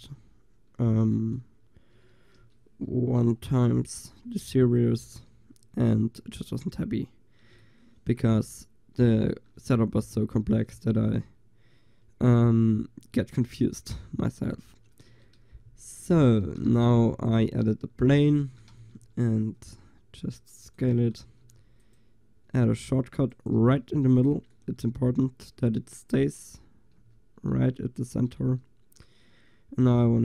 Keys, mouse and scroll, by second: 0.0 n, 2.0 a, 2.4 a, 3.1 Delete, 4.0 KP_7, 4.5 KP_5, 5.1 middle click, 10.8 shift+a, 15.1 Tab, 16.5 s, 17.5 Tab, 18.2 Tab, 18.5 s, 21.0 a, 21.5 ctrl+r, 23.5 click, 27.0 a.